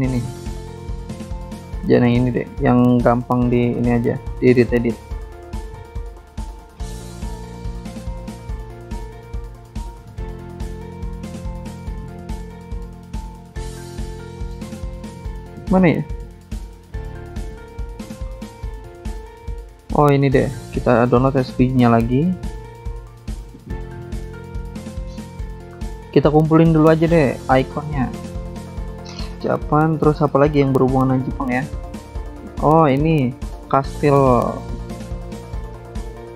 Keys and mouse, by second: 3.7 click, 3.8 click, 6.0 Escape, 7.6 click, 7.7 click, 9.5 click, 9.7 click, 11.2 Escape, 14.1 click, 15.2 click, 17.1 click, 18.6 click, 18.7 click, 21.2 click, 21.3 click, 22.3 click, 22.4 click, 26.8 click, 27.6 click, 28.6 click, 30.5 click, 32.4 click, 32.5 click, 34.0 click, 34.2 click, 35.2 click, 35.3 click.